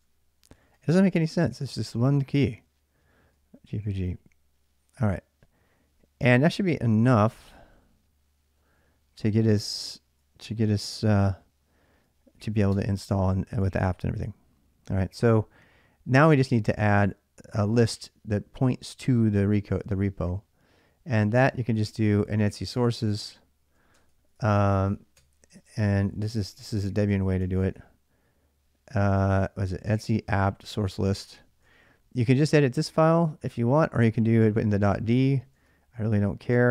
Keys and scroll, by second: 0.0-1.0 typing, 2.9-4.1 typing, 7.3-10.9 typing, 8.5 Right, 8.8 Right, 9.1 Right, 12.3-13.0 typing, 20.6-24.3 typing, 24.5 Tab, 24.9 Tab, 25.6-27.2 typing, 29.1 Tab, 29.5-33.9 typing, 35.4 ctrl+[, 35.5-36.7 typing.